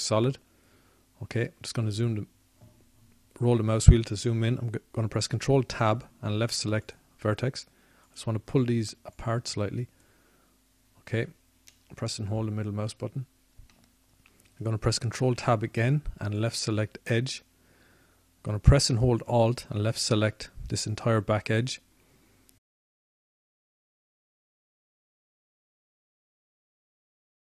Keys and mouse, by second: 1.9 z, 3.1 z, 8.8 ctrl+Tab, 10.7 ctrl+Tab, 18.6 ctrl+Tab, 20.3 ctrl+Tab.